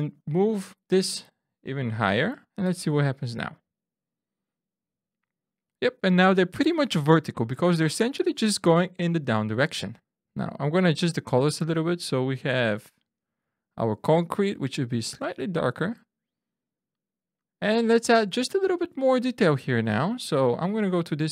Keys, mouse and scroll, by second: 1.6 click, 2.8 Tab, 9.8 click, 10.8 click, 12.6 click, 14.6 click, 18.7 click, 19.5 Tab.